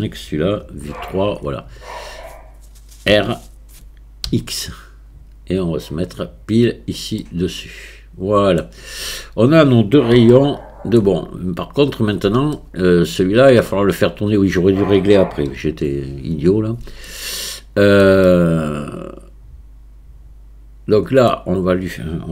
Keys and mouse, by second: 0.6 KP_3, 3.1 r, 7.2-8.6 middle drag, 10.4-11.0 shift+middle drag, 12.6 shift+middle click, 15.5 KP_1, 17.1-18.1 shift+drag, 18.3-21.3 middle drag.